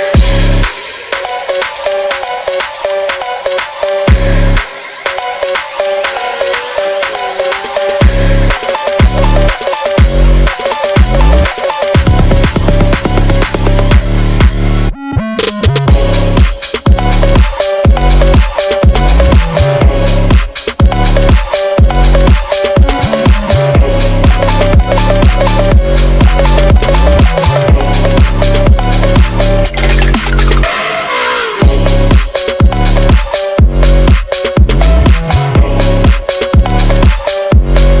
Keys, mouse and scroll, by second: 0.7-1.3 alt+shift+drag, 2.4 shift+click, 3.3-3.7 scroll up 2, 3.7 shift+click, 4.1 shift+click, 4.9 click, 6.1 click, 6.2 scroll down 3, 6.8 shift+click, 7.1 shift+click, 7.4 shift+click, 8.7 shift+click, 9.6 shift+click, 10.6 shift+click, 11.6 click, 12.0 scroll up 2, 12.3 click, 12.8 shift+click, 13.0 scroll down 1, 13.7-14.3 drag, 14.9 click, 15.6 click, 18.3 click, 18.5-19.1 scroll up 3, 19.1-19.7 scroll down 1, 19.7 scroll down 1, 20.0 Tab, 20.3 click, 20.4 Tab, 20.6 click, 21.4 click, 22.2 c, 25.8 scroll down 2, 25.9 click, 26.1 scroll up 2, 26.3 c, 27.8 shift+click, 28.4 c, 31.4 shift+click, 32.4 shift+click, 33.4 shift+click, 34.0 shift+click, 35.0 shift+click, 36.2 shift+click, 37.0 shift+click, 37.2 click, 37.4-38.0 scroll down 1.